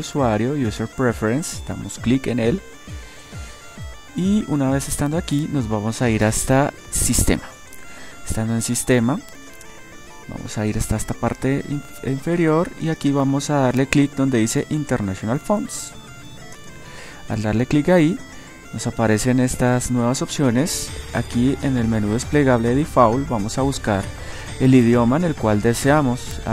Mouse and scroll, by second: 17.8-19.8 middle drag.